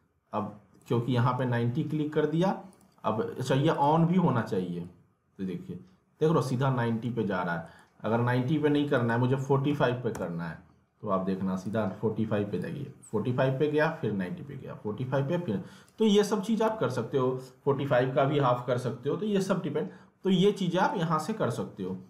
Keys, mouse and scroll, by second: 1.4 ctrl+z, 2.7-7.0 drag, 7.0 ctrl+z, 7.6 right click, 8.9 click, 11.6-16.6 drag, 16.6 w, 19.6-20.8 scroll down 1, 20.8 right click.